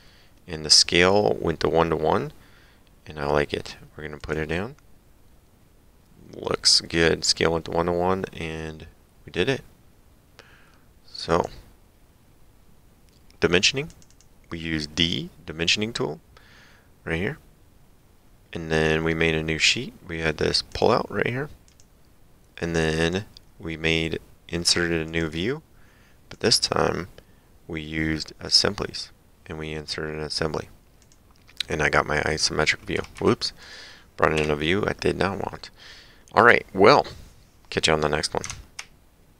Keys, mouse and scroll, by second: 4.2 click, 11.3 click, 13.9 click, 20.7 click, 22.9 click, 25.1 click, 26.4 click, 28.5 click, 31.0 click, 33.0 Escape, 33.6 click.